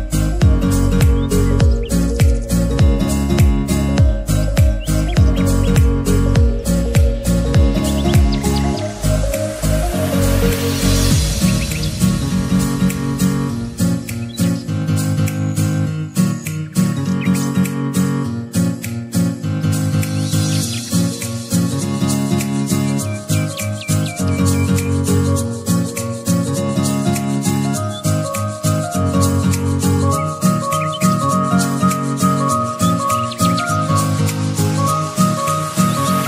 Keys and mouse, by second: 5.4-8.2 drag, 8.2-21.0 alt+drag, 21.5 ctrl+Caps_Lock, 22.0 ctrl+t, 24.0-25.4 alt+drag, 24.3-26.0 typing, 25.4 ctrl+shift+z, 26.2 ctrl+z, 27.2-36.2 alt+shift+drag, 27.5 typing.